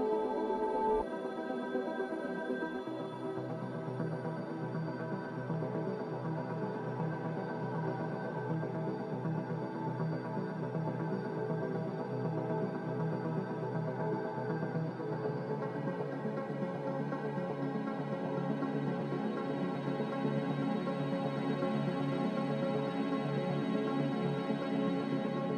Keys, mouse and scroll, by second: 1.9 F9, 12.6 ctrl+z, 12.9 ctrl+z, 13.4 ctrl+z.